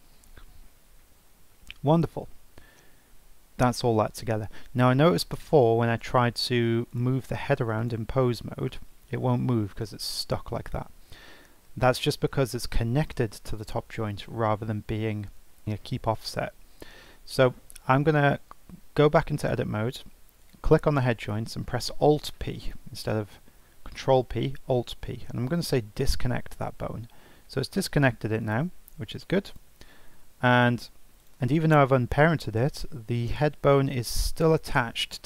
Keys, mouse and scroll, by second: 2.3 scroll down 3, 3.1-6.0 scroll up 2, 6.0-7.9 drag, 8.7 g, 19.1 Tab, 20.4 click, 22.6 alt+p, 28.4-31.3 drag, 34.1 g.